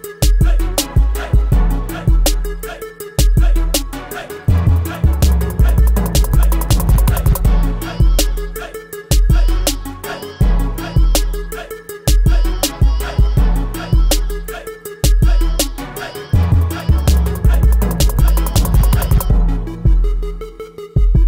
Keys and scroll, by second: 16.8 ctrl+a, 17.8 0, 19.0 space, 20.0 1, 20.2 2.